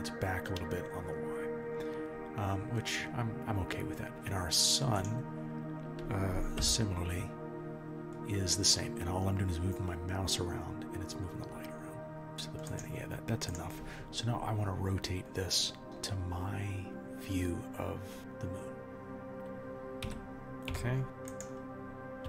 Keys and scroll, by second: 6.5 r, 16.9 r, 20.7 r.